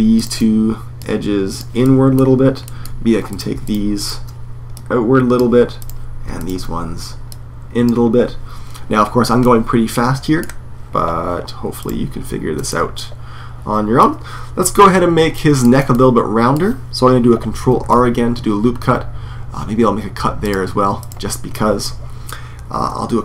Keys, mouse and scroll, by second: 1.6 click, 1.6 middle click, 1.8 click, 1.9 click, 2.4 middle click, 3.0-4.5 drag, 7.8-9.0 drag, 9.1-11.5 middle drag, 11.5 right click, 12.4 middle click, 12.5 right click, 12.6 middle click, 12.8 middle click, 12.9 right click, 13.0-14.4 middle drag, 14.4-15.1 scroll up 1, 15.1-17.6 middle drag, 17.6 ctrl+r, 20.8 right click, 21.2-23.0 middle drag, 23.0 ctrl+r.